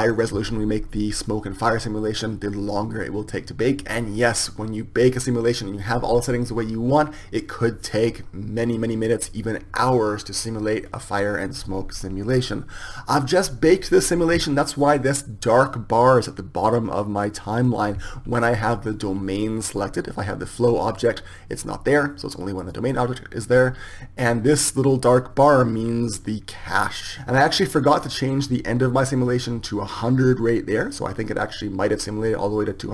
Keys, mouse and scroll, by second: 23.4-32.7 drag.